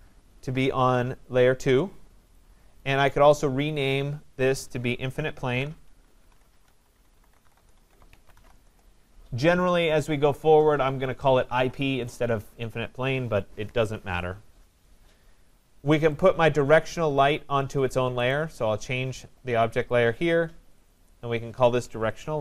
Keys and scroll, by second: 5.0 ctrl+a, 8.2 Return.